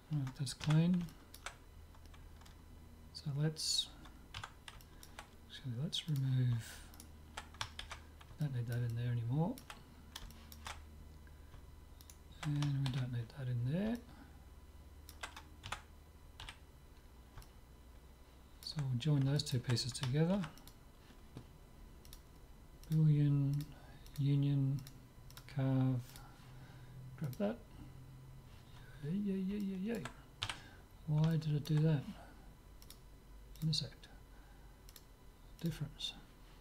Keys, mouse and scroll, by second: 0.7 Tab, 1.1-3.6 middle drag, 4.4 Tab, 4.8-6.1 middle drag, 6.1-7.9 drag, 7.0-8.8 right drag, 7.9 ctrl+x, 8.5 click, 8.8-12.9 middle drag, 12.1 click, 13.1 ctrl+x, 13.1 right click, 13.7 click, 13.9-16.1 middle drag, 15.8 Tab, 16.5 z, 17.0 middle click, 19.2 middle click, 20.3 ctrl+s, 22.1-27.9 drag, 29.1-33.2 middle drag, 30.5 z, 32.8-34.6 drag, 35.0-36.6 drag.